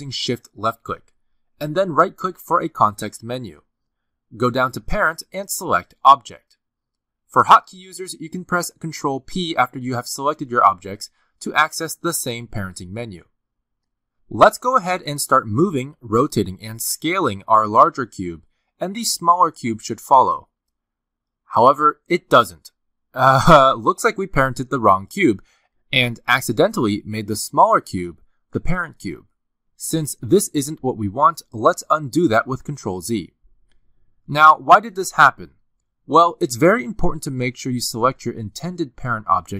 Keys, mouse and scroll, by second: 0.1 shift+click, 3.4 right click, 10.0 ctrl+p, 16.6 click, 19.0 r, 20.4 g, 21.6 s, 22.9 r, 23.6 g, 25.9 click, 26.6 r, 28.4 g, 29.3 s, 31.0 r, 32.7 ctrl+z, 33.4 ctrl+z, 33.9 ctrl+z, 38.1 click.